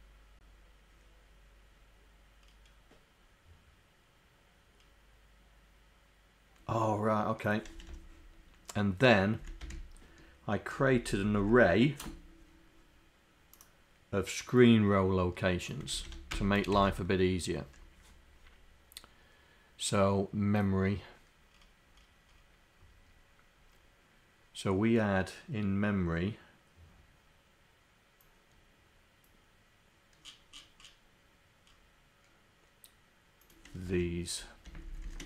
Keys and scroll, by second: 7.8 Home, 9.5 Down, 11.3 shift+Down, 34.9 shift+Down.